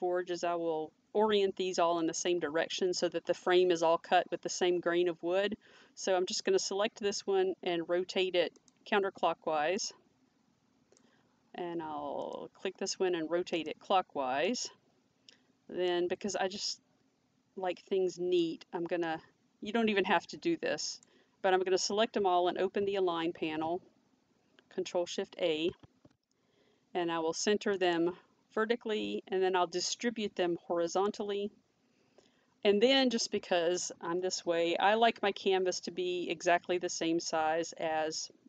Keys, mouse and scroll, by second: 8.6 click, 9.8 click, 12.2 click, 16.7 click, 19.1 click, 23.3 ctrl+shift+a, 25.7 ctrl+shift+a, 27.8 click, 30.9 click, 31.2 click.